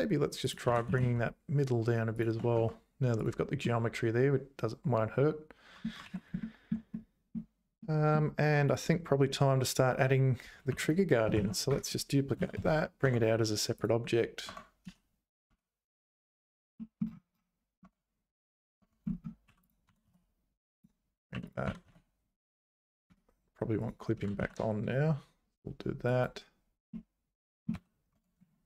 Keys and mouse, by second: 0.4 click, 0.6 g, 2.5 Tab, 3.2 click, 3.6-5.8 middle drag, 6.0 ctrl+s, 6.4 shift+middle click, 6.9 middle click, 7.8 middle click, 8.7 click, 8.9 Tab, 10.7 3, 10.8 click, 11.4 shift+d, 12.4 p, 13.0 Tab, 13.8 click, 14.5 Tab, 14.9 a, 15.5 `, 16.2 `, 16.8 middle click, 17.8 Tab, 18.8 Tab, 19.5 2, 19.9 g, 21.3 3, 21.6 g, 23.8 click, 24.2 g, 26.9 click, 27.9 `, 28.1 Tab.